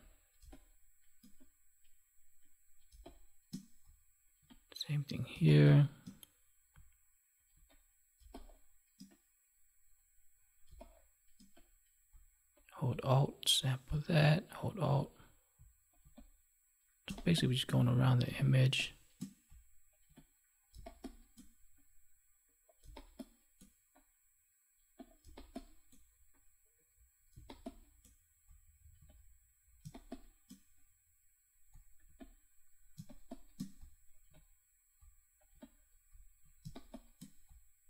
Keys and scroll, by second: 0.3 space, 2.8 space, 5.3 space, 8.1 space, 10.6 space, 17.0 space, 20.7 space, 22.8 space, 25.1 space, 27.3 space, 29.8 space, 32.9 space, 36.6 space.